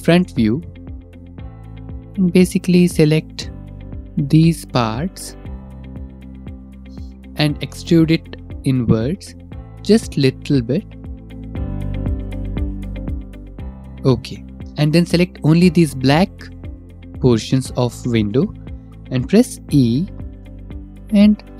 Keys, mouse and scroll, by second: 0.2 click, 2.1 shift+middle click, 3.8 click, 4.2 click, 6.9 click, 9.1 middle click, 9.5 e, 13.3 shift+middle click, 14.3 middle click, 15.5 click, 16.1 shift+middle click, 16.6 shift+middle click, 16.6 scroll, 17.6 shift+middle click, 18.2 shift+middle click, 19.4 scroll, 19.9 scroll, 21.3 e.